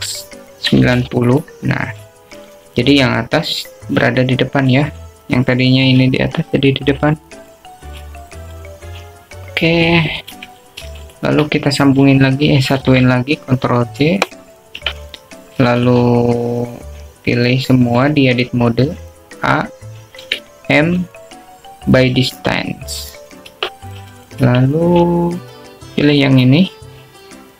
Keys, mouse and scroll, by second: 0.9 r, 4.0 click, 5.5 click, 12.5 alt+z, 13.0 shift+click, 14.6 ctrl+j, 16.9 Tab, 18.0 a, 22.4 m, 25.6 Tab, 26.6 Tab, 27.4 click.